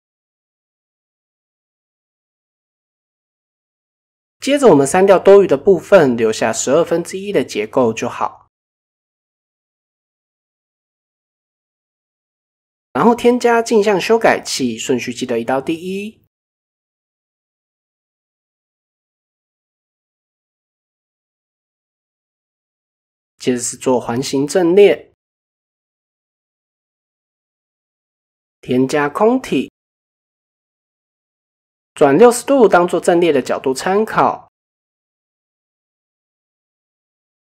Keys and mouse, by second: 0.4 Tab, 1.6 click, 1.9 middle click, 2.6 middle click, 3.2 KP_7, 3.5 Tab, 5.0 click, 5.5-6.1 drag, 6.3 x, 7.7 click, 8.4 x, 9.6 x, 11.0-12.8 drag, 13.5-14.3 drag, 15.1 click, 17.7 shift+middle click, 20.4 click, 21.5-25.4 drag, 26.3 Tab, 26.8 click, 27.4 shift+a, 30.2 r, 31.3-32.4 drag, 35.1-35.6 drag, 36.9 drag.